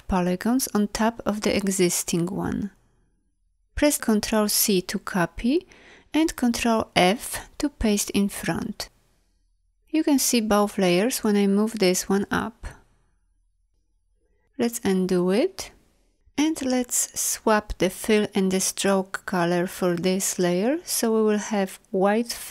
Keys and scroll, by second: 4.5 ctrl+c, 6.7 ctrl+f, 14.4 ctrl+z.